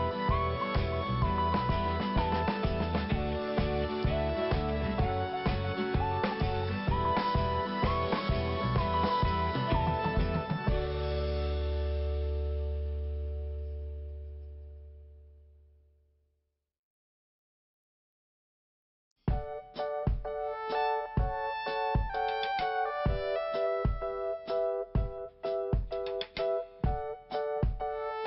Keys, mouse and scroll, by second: 0.0 click, 0.1 double click, 0.8 double click, 3.8 scroll down 1, 4.6 scroll up 1, 4.6 scroll down 1, 4.9 scroll up 1, 7.1 p, 9.1 click, 12.8-13.2 scroll down 1, 13.8 click, 16.3 scroll down 1, 17.8 click, 18.0 click, 18.1 double click, 19.0 click, 19.0 5, 20.6 scroll down 1, 20.9 click, 21.9 click, 22.7 click, 24.7 scroll up 1, 26.0 click.